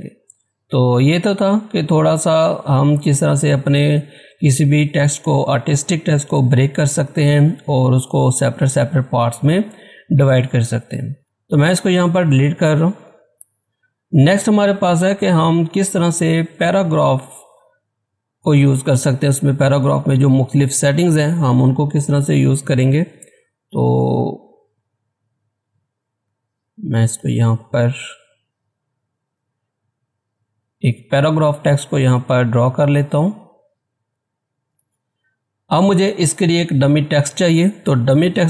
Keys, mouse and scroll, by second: 10.3-13.1 drag, 13.1 Delete, 13.6 scroll down 1, 14.7-16.4 scroll up 1, 16.5 click, 18.1-18.8 scroll down 1, 18.8-19.6 scroll up 1, 19.6-20.9 scroll down 1, 21.5 shift+F4, 23.7 shift+F4, 24.5 click, 26.3 z, 26.6-37.1 drag.